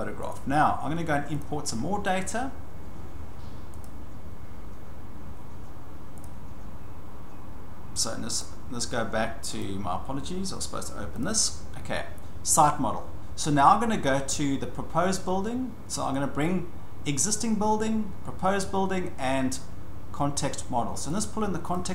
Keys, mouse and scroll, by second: 0.3 click, 1.2 scroll, 1.4 click, 3.8 click, 4.7 click, 6.3 click, 8.4 click, 9.6 click, 11.2 click, 19.1 scroll up 2, 19.9 scroll, 21.7 click.